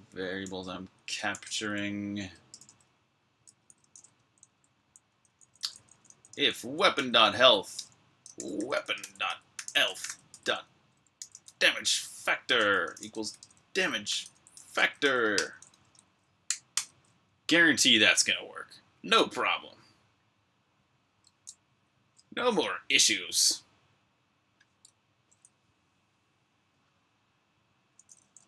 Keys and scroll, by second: 0.0-2.5 typing, 3.3 Tab, 3.5 Tab, 3.9 Escape, 4.4-9.6 typing, 16.6 super+b, 16.6-18.0 typing.